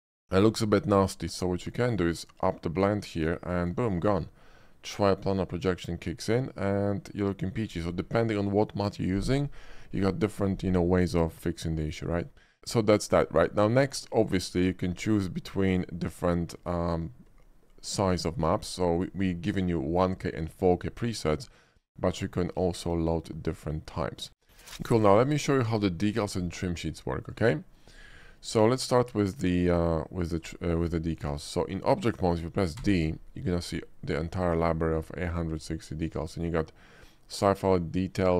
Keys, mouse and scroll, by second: 0.7-1.1 shift+middle drag, 1.4 middle click, 1.6 middle click, 2.6-3.8 drag, 4.5-7.7 middle drag, 11.7 shift+middle click, 14.2 click, 15.7 click, 16.7 click, 25.0 ctrl+shift+b, 25.1 middle click, 25.8-26.2 shift+middle drag, 26.9 shift+middle click, 27.1 shift+middle drag, 27.4 shift+middle click, 27.7 shift+middle click, 28.6 shift+middle click, 29.0 shift+middle click, 29.6 shift+click, 30.4 shift+click, 31.1 shift+middle click, 31.4 shift+middle drag, 31.4 shift+scroll down 1, 32.9 d, 37.0 click.